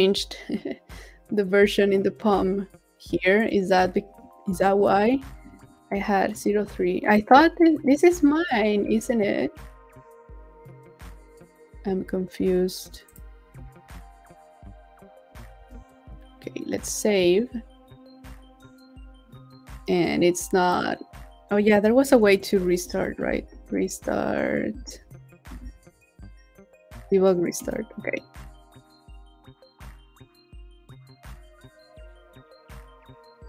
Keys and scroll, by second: 15.3 super+s, 22.1 shift+super+p.